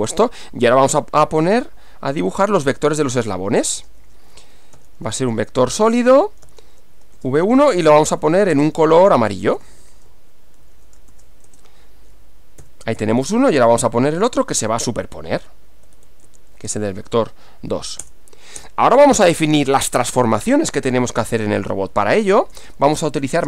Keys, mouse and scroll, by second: 1.8-11.6 typing, 12.6 Up, 13.0 Left, 14.5 BackSpace, 14.7 2, 15.1 Left, 16.3 Right, 16.7 BackSpace, 16.9 2, 18.0 Return, 21.8-23.4 typing.